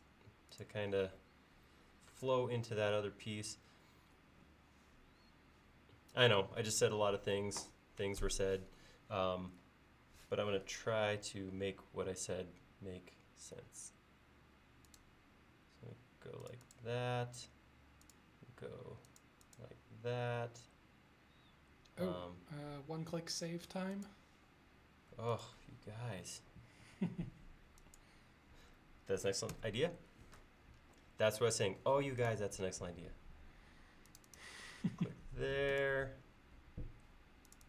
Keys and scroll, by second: 10.8 a, 29.6 ctrl+s.